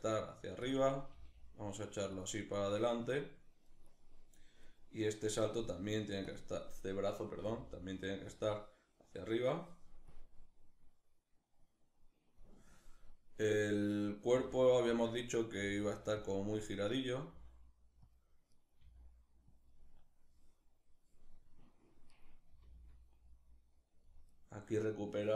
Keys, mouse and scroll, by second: 0.3 click, 0.7 g, 1.9 click, 4.3 right click, 5.2 g, 5.9 click, 7.0 g, 8.0 click, 10.0-13.6 drag, 13.6 right click, 13.9 r, 14.6 click, 14.9 right click, 15.1 r, 15.9 click, 16.5 right click, 16.9 r, 17.7 click, 18.1 right click, 18.4 r, 19.3 click, 21.7 right click, 22.1 r, 23.7 click, 23.9 right click, 25.2 r.